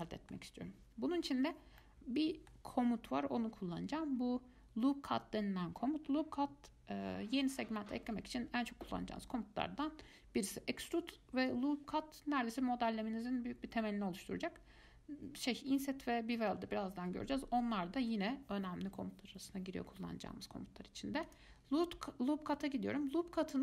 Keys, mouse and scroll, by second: 21.4 click.